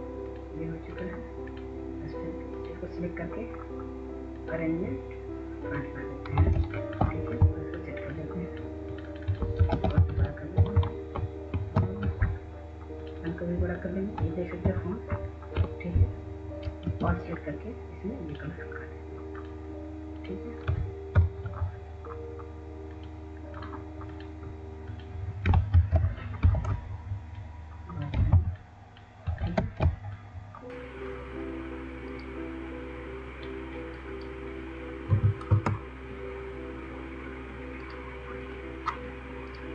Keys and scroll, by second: 10.2 ctrl+a, 11.0 ctrl+shift+., 11.2 ctrl+shift+., 12.3 ctrl+shift+,, 15.1 ctrl+shift+., 17.3 ctrl+a, 21.6 ctrl+0, 26.3 ctrl+g, 30.1 ctrl+g, 30.1 w, 35.1 2, 35.6 Return.